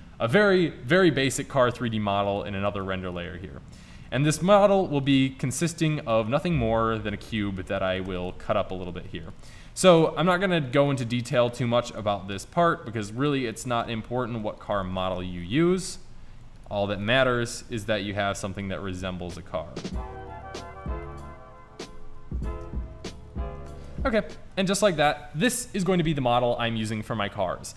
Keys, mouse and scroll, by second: 2.4 click, 4.1 shift+a, 5.6-6.8 middle drag, 7.2 s, 8.2 Tab, 8.9 ctrl+r, 9.7 ctrl+r, 10.8 ctrl+r, 14.0 g, 14.9 ctrl+z, 15.2 o, 15.6 g, 16.9 ctrl+z, 17.3 o, 18.2 g, 21.9 e, 22.3 ctrl+z, 22.4 e, 22.9 click, 23.4 e, 23.6 click, 23.9 Tab.